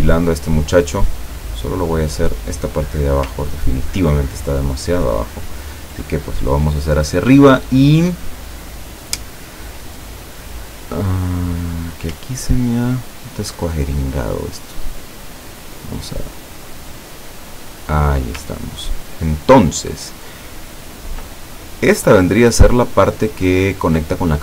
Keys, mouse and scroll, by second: 1.0 click, 2.2 click, 4.0-5.9 ctrl+drag, 10.6 click, 11.7 click, 12.5-13.0 ctrl+scroll up 2, 15.4-18.3 drag, 20.0 ctrl+scroll down 2, 20.6-21.1 ctrl+scroll down 4, 21.4 ctrl+click.